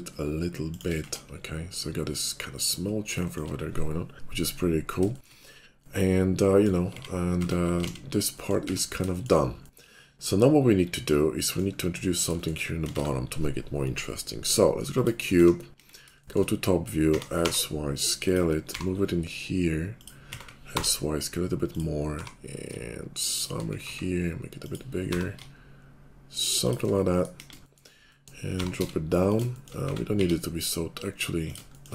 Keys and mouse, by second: 1.0 Tab, 3.1 shift+middle click, 5.0 shift+middle click, 6.9 x, 7.4 Tab, 8.0 alt+x, 8.6 Tab, 12.3 shift+click, 12.8 shift+click, 12.8 shift+a, 15.3 `, 15.7 KP_5, 16.0 shift+click, 17.0 s, 18.5-22.7 middle drag, 18.7 g, 20.7 s, 22.1 g, 22.7 shift+click, 23.5-25.4 middle drag, 23.8 s, 25.0 g, 25.4-26.8 shift+drag, 26.8 middle click, 27.3 KP_5, 27.5 shift+click, 28.5 g, 29.8 s.